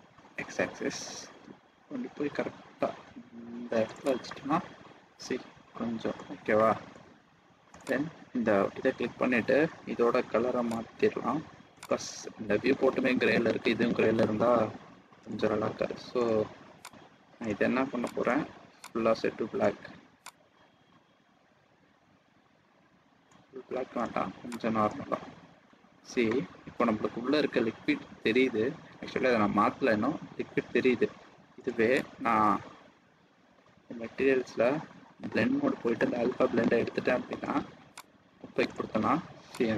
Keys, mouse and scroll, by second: 4.4 middle click, 7.1 scroll down 1, 7.7 click, 10.6 click, 15.9 click, 16.9 click, 18.8 click, 24.4 click, 24.9 scroll down 1, 25.0 middle click, 25.4 scroll up 1, 25.5-26.2 scroll down 2, 25.9-26.9 scroll up 8, 26.7 middle click, 27.3 scroll down 1, 31.9 click, 34.4-36.1 scroll down 11, 36.4 scroll down 5, 36.7-38.3 scroll down 2, 38.3 click.